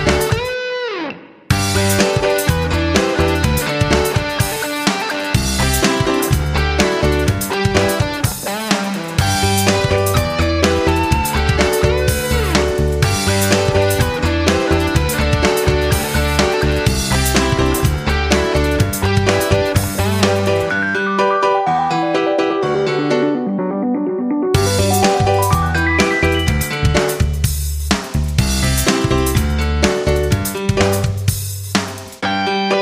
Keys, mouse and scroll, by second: 8.7 ctrl+c, 10.3 click, 12.1 ctrl+v, 12.7 click, 13.7 ctrl+v, 15.7 Return, 17.8-19.7 drag, 20.1 shift+click, 21.6-22.7 drag, 28.0 click, 28.7 F9, 30.0-32.7 drag.